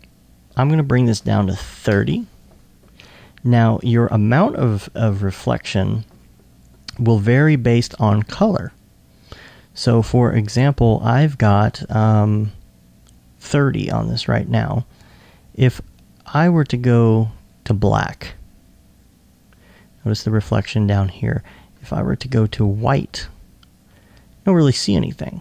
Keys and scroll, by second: 1.4-2.6 typing, 5.3 2, 7.1 2.